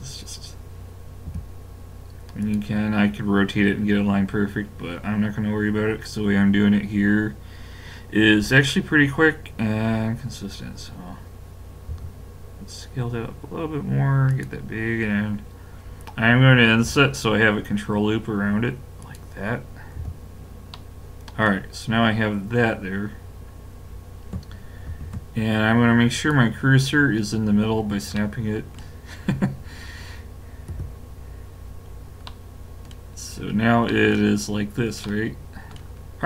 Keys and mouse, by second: 1.3 g, 11.9 s, 16.9 i, 20.0 a, 20.7 middle click, 24.9 shift+s, 30.7 KP_5, 32.2 middle click, 35.1-36.2 middle drag.